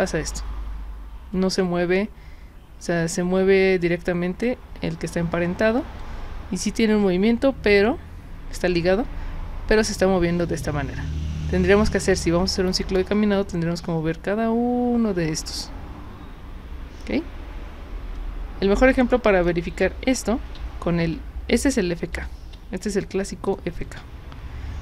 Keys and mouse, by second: 6.0-19.4 drag, 20.9 ctrl+z, 22.4 ctrl+z, 23.5 click.